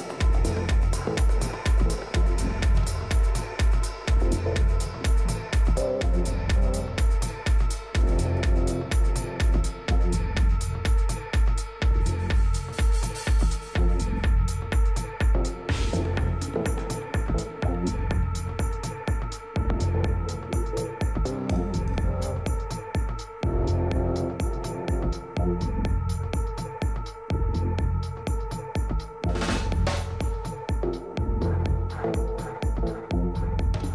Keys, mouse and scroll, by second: 0.1-2.2 middle drag, 1.4 a, 2.0 right click, 2.6 middle click, 3.3 Tab, 6.7-9.3 middle drag, 10.3-12.7 middle drag, 11.6 a, 12.1 w, 14.8 Tab, 15.2-17.5 middle drag, 17.7 middle click, 20.0-21.1 right drag, 21.1 Tab, 23.3 a, 24.7-26.5 drag, 25.4 z, 26.9 b, 29.4 middle click, 29.8 z, 32.9 Delete.